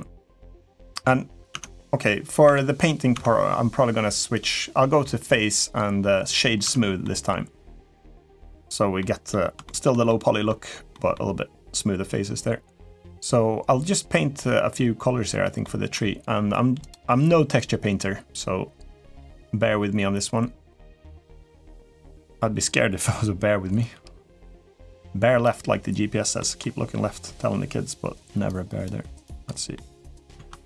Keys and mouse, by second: 0.5 middle click, 1.3 Tab, 2.2 Tab, 2.9 Tab, 4.3-6.1 drag, 6.4 Tab, 6.8 middle click, 8.0 middle click, 8.8 middle click, 9.4 shift+middle click, 9.8 middle click, 10.7 middle click, 15.4 middle click, 16.6 click, 23.6-25.2 drag, 26.1 middle click, 28.2 click, 29.0 click, 29.5 middle click, 30.1 ctrl+z.